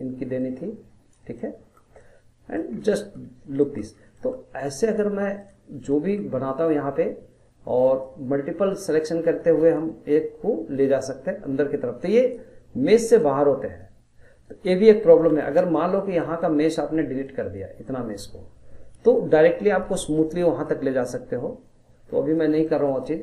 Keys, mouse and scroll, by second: 0.4 click, 1.4-2.7 middle drag, 2.7 scroll, 2.9-4.0 middle drag, 4.0 scroll, 4.1 middle click, 4.9 click, 5.4 shift+click, 5.9-8.0 middle drag, 8.0 click, 14.5 ctrl+z, 15.2-19.3 middle drag, 21.2 click, 22.6-23.2 middle drag.